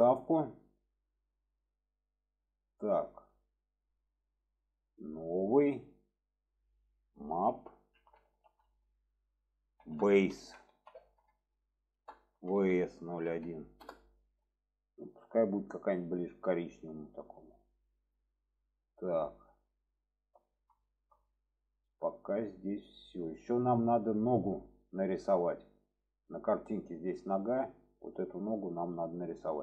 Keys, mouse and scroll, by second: 5.3-14.5 drag, 18.0 click, 18.7-20.5 middle drag, 20.9 shift+middle click, 23.8 shift+middle click, 26.3 click, 29.4-29.6 shift+middle drag.